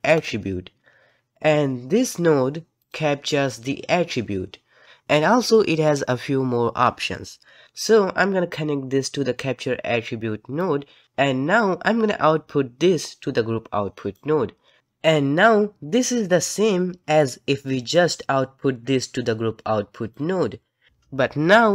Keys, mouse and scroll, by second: 14.1-20.1 drag, 20.9 click.